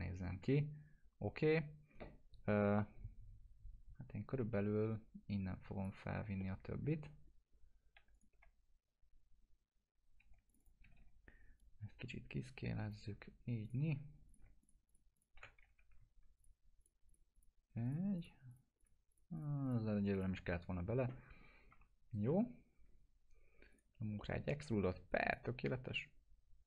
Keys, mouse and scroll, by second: 4.9-5.8 drag, 6.4-7.0 alt+middle click, 7.3 scroll up 1, 8.1 click, 8.3 F4, 8.9 scroll up 1, 10.2-11.5 typing, 10.5 click, 11.6-13.1 drag, 15.7 F3, 16.4 ctrl+click, 21.7 F4, 23.7 click, 24.2 alt+middle click, 25.1 right click, 25.3-26.6 drag.